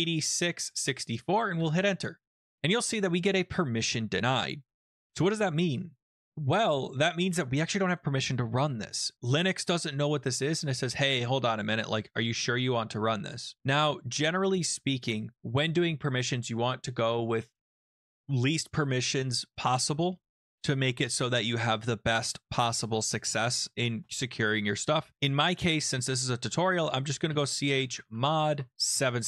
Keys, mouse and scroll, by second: 0.0-0.2 typing, 1.5 Return, 27.0-29.2 typing.